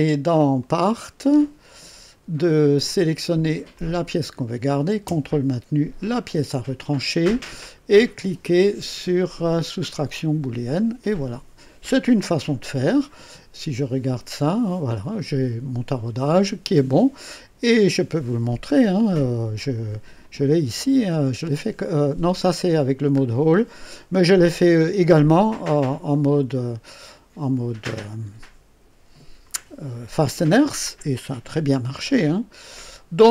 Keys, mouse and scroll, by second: 0.5 click, 2.8 click, 3.7 click, 6.0 ctrl+click, 9.8 click, 11.3 scroll up 2, 12.2 click, 19.5 click, 21.0 scroll up 1, 21.5 right click, 23.2-23.6 scroll down 1.